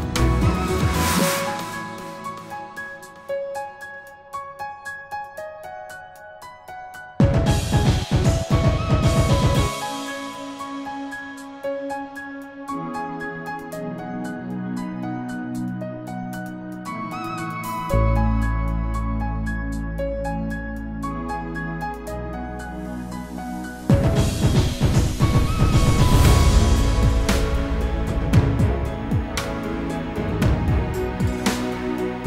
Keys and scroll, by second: 12.6 ctrl+g.